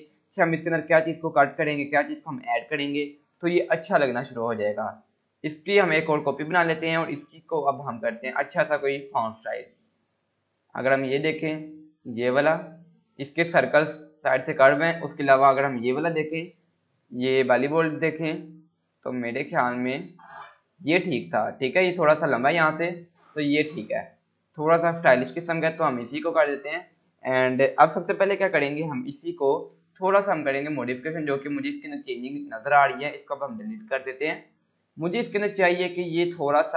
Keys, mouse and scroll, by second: 4.8-6.3 click, 5.7 right click, 6.4-8.0 drag, 22.4 click, 31.0 scroll up 1, 31.5 scroll down 1, 31.6 scroll, 31.9 scroll up 1, 32.9 click, 33.3-33.9 scroll down 1, 34.2 Delete, 34.6 click, 35.0 scroll up 1, 35.6-36.3 click.